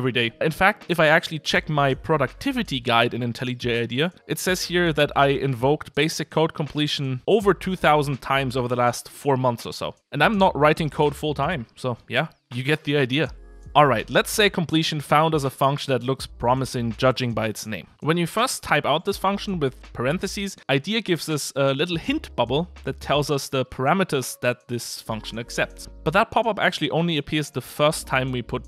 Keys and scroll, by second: 21.5 Return.